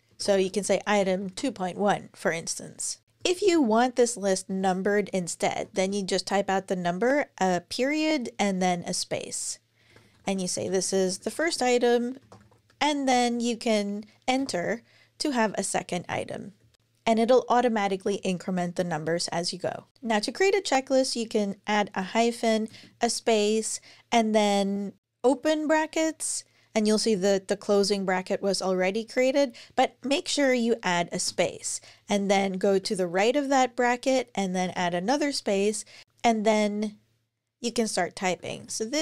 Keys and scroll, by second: 0.0-1.6 typing, 3.0 Return, 3.1 Return, 3.3 Return, 4.3 Return, 5.1-6.0 typing, 9.4-12.9 typing, 14.2 Return, 16.4 2, 16.5 Return, 16.7 3, 19.7 super+BackSpace, 21.8 -, 22.5 space, 25.0 [, 31.0 space, 32.5 Right, 34.4 space, 37.9-39.0 typing.